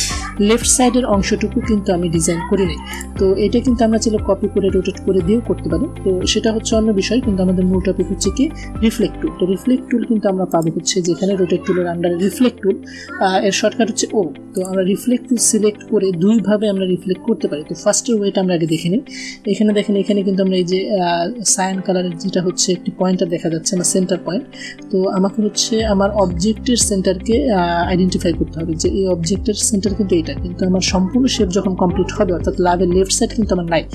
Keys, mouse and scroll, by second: 2.8 click, 10.4 right click, 14.5 click.